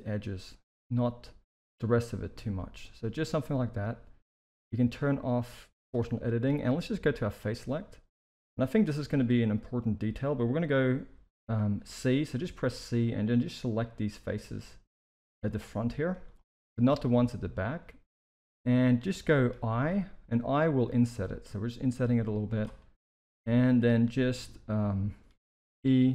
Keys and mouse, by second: 2.0-3.7 middle drag, 5.7 click, 6.1 middle click, 7.2 click, 7.5 middle click, 8.5 KP_1, 9.1 alt+a, 11.8 c, 15.1 z, 16.1 z, 16.6-18.5 middle drag, 18.8 shift+middle click, 19.8 i, 22.7 middle click, 24.8 middle click, 25.6 e.